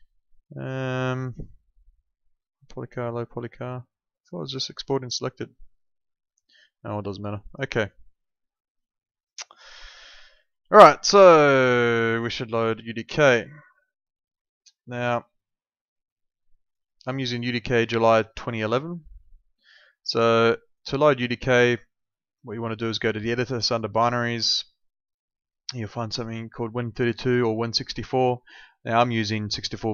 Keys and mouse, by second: 3.0 click, 7.4 click, 10.2 alt+middle click, 16.6 click, 23.9 click.